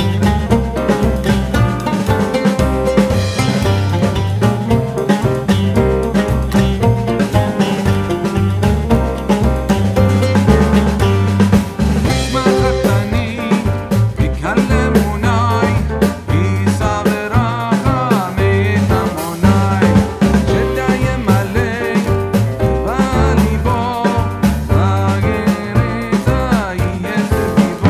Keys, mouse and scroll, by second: 2.2 click, 2.8-3.4 typing, 3.6 Return, 4.5-6.8 drag, 6.8-9.7 drag, 9.7-11.3 shift+drag, 12.8-15.0 drag, 15.1 click, 16.8-17.4 scroll down 1, 17.4-19.4 drag, 21.2 click, 26.2 click, 27.4 alt+scroll up 1.